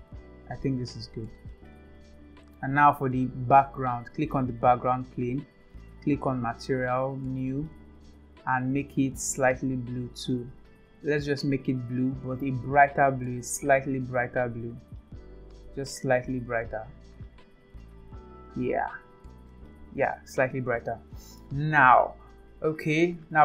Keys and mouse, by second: 0.6 click, 3.5 click, 7.3-7.6 drag, 9.3 click, 11.4 click.